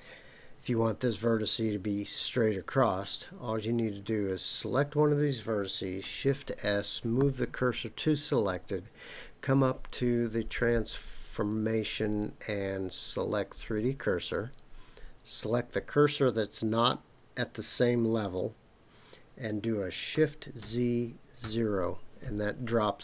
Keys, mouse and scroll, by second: 4.5 click, 6.3 shift+s, 10.6-13.7 drag, 15.4 click, 20.1 s, 20.6 z, 21.4 KP_0.